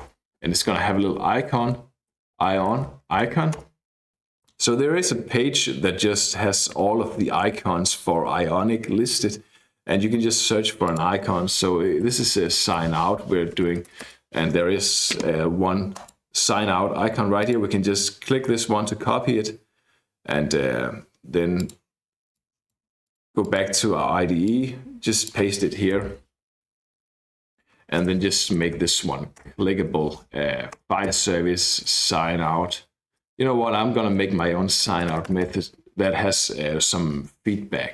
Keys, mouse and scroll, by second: 0.0-3.6 typing, 4.5 click, 6.1-6.9 scroll down 2, 7.0-7.3 scroll down 2, 7.3-8.1 scroll up 2, 8.1 scroll up 1, 8.8-10.3 scroll down 2, 10.3-10.8 scroll up 2, 10.8 click, 11.8-14.0 typing, 15.9 click, 16.5-17.2 scroll down 1, 17.4 click, 21.6 click, 22.3 click, 23.0 click, 23.4 click, 24.4-25.6 drag, 26.0 ctrl+v, 27.4 click, 28.0-29.2 typing, 29.4 Return, 30.7 Return, 31.1-35.4 typing.